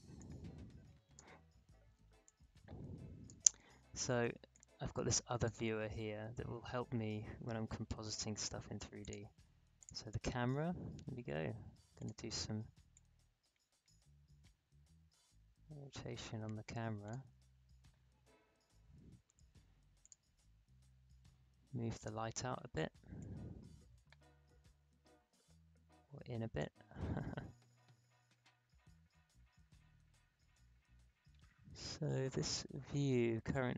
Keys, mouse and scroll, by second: 9.0 click, 11.9-19.5 drag, 20.0-28.8 drag.